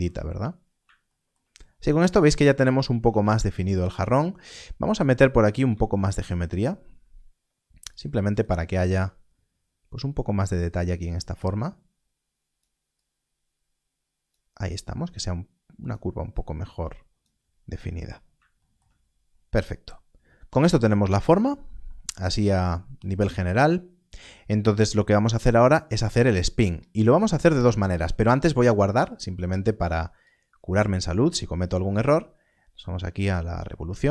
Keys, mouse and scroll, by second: 0.3 scroll, 0.5 scroll down 1, 1.3-1.7 scroll down 1, 2.5-2.9 scroll up 1, 2.9 Tab, 3.7 scroll up 1, 5.4 click, 5.8 alt+d, 7.8 click, 8.7 alt+d, 10.6 click, 17.4-17.9 scroll down 1, 18.8 shift+scroll, 18.9 scroll down 1, 24.7-25.2 scroll down 1, 26.1 scroll up 1, 29.0 click.